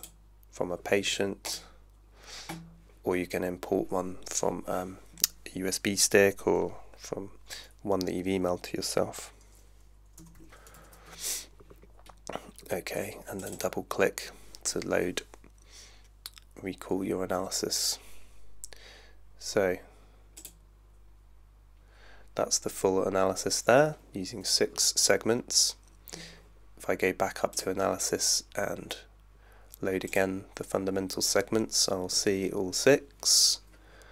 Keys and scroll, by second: 10.1-11.3 typing.